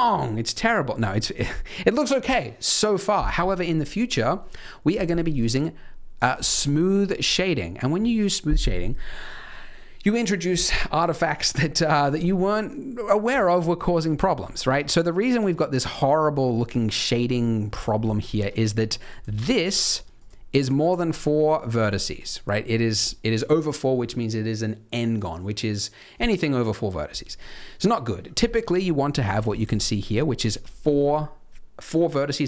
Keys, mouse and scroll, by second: 0.5-1.0 scroll up 5, 3.6-3.9 scroll down 2, 4.1 middle click, 5.2 right click, 6.6 middle click, 7.2-7.6 scroll up 3, 7.5 middle click, 9.1 middle click, 10.4-10.9 scroll down 2, 10.9-11.5 scroll up 1, 11.5-12.2 scroll down 1, 13.8 middle click, 14.2 shift+middle click, 14.4 scroll up 2, 14.6 Tab, 15.3 Tab, 15.7 middle click, 16.9 middle click, 17.8 scroll down 1, 18.0 shift+middle click, 18.2-19.0 scroll up 2, 18.3 Tab, 19.0 click, 19.3 shift+click, 19.8 shift+click, 20.1 click, 20.5 shift+click, 20.8 shift+click, 21.1 click, 21.5 click, 21.8 shift+click, 28.6 scroll up 3, 28.8 middle click, 29.4 click, 29.7 shift+click, 30.0 click, 30.3 shift+click.